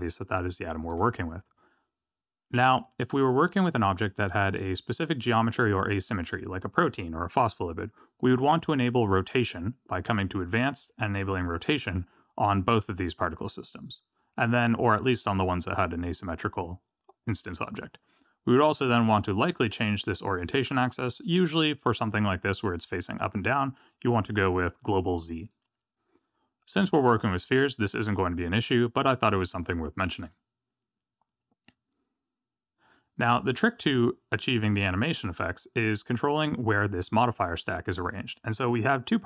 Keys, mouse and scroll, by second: 10.2 click, 11.4 click, 13.7 click, 20.4 click, 23.2 click, 36.3 click, 37.9 click, 38.5 click.